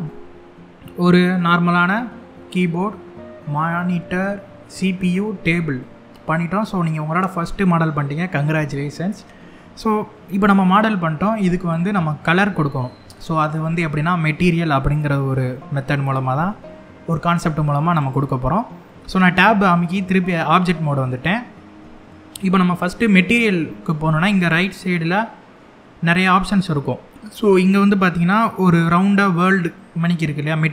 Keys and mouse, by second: 1.6 middle click, 4.3 middle click, 5.5 middle click, 16.1 Tab, 17.7 click.